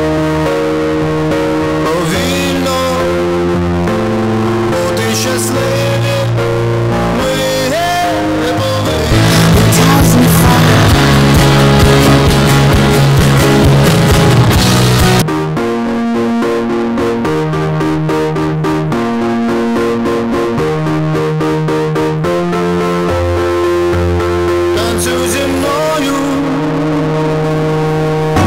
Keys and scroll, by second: 15.2 Page_Down.